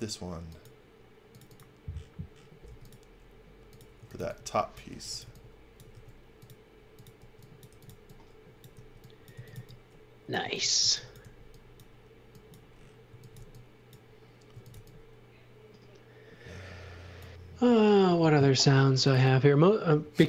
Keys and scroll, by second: 2.6 b, 3.7-5.9 typing, 7.1-11.7 typing, 12.8-15.2 typing, 18.2-19.6 typing.